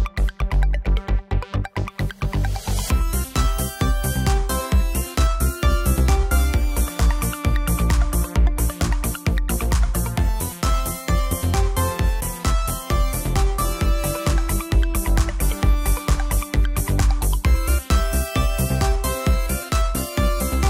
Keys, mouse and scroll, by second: 3.6 shift+z, 6.2 shift+z, 7.6 shift+d, 9.0 click, 9.3 middle click, 10.1-11.7 drag, 11.9-14.0 drag, 14.3 middle click, 17.4 middle click, 18.0 click.